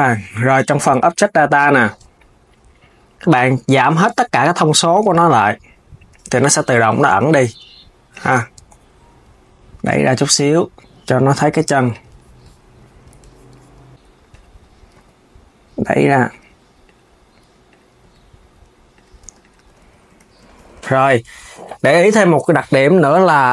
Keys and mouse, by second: 5.0-6.1 drag, 7.0 Tab, 7.8 click, 8.2 KP_1, 9.3 click, 10.1 KP_3, 11.4 Tab, 11.6 click, 12.8 Tab, 13.7 click, 14.0 click, 14.2 KP_3, 14.6 g, 16.5 click, 17.4 click, 17.7 g, 18.9 Tab, 19.1 click, 19.6 s, 22.3 s.